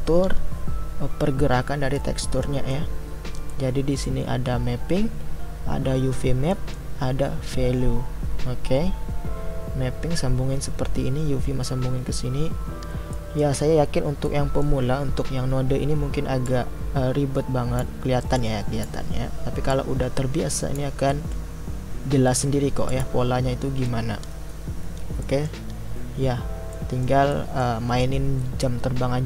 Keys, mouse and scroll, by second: 2.0-18.4 middle drag, 18.4-21.2 drag, 22.9-29.2 drag.